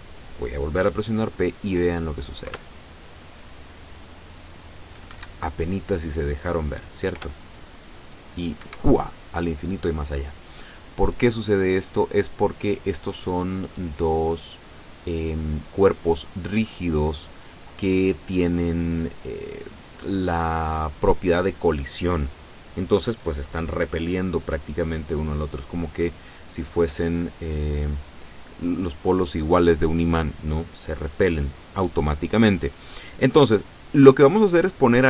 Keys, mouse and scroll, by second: 2.5 p, 5.1 Escape, 7.2 p, 8.6 Escape, 13.5 right click, 14.7 right click, 34.1 right click.